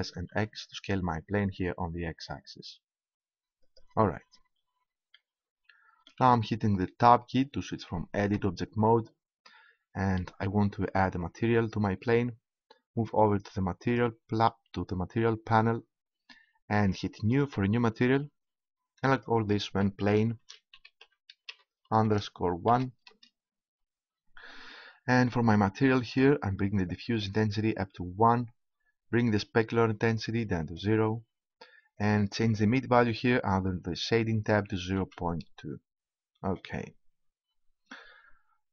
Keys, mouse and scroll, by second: 3.7-5.9 drag, 8.3 Tab, 11.8-19.0 drag, 19.1-20.9 drag, 27.2-29.1 drag, 30.1-33.7 drag.